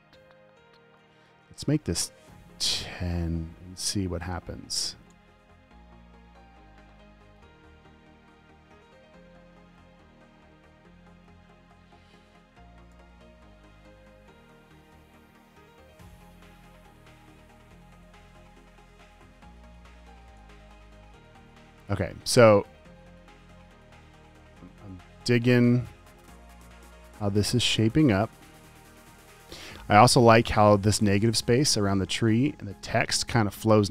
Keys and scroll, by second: 2.8-3.5 typing, 4.1 Tab, 11.6 t, 13.3 Delete, 20.7 typing, 21.9 typing.